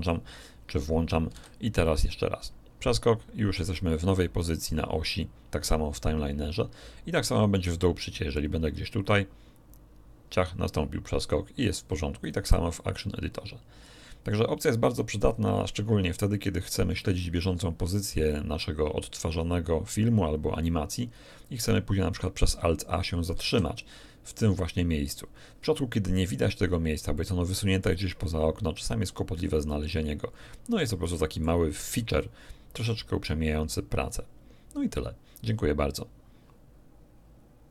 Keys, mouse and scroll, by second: 1.3 alt+a, 1.8 alt+click, 8.4 click, 12.2 click, 23.4 alt+a, 27.1 middle click, 29.3-31.6 middle drag.